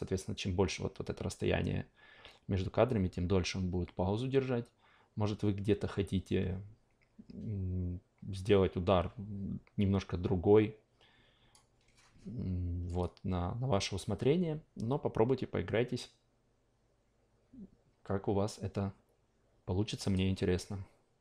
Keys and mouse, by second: 20.0 click.